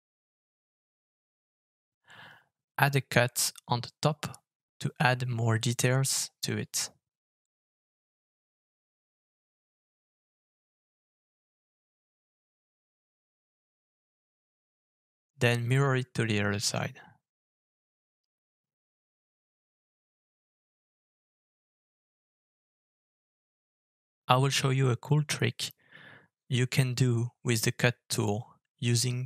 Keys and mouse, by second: 3.1 alt+f, 9.0-25.4 middle drag, 26.1-27.1 middle drag, 28.2 alt+f.